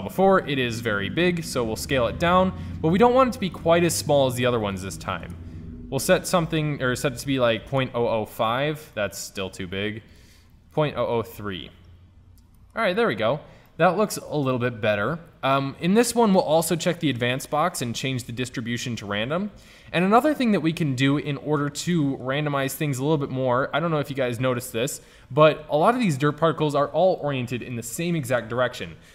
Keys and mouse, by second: 1.5-3.3 drag, 4.1-5.4 drag, 6.5 middle click, 7.5 KP_0, 11.0 KP_0, 12.3 middle click, 14.1 KP_0, 20.3 click, 21.0-22.3 middle drag.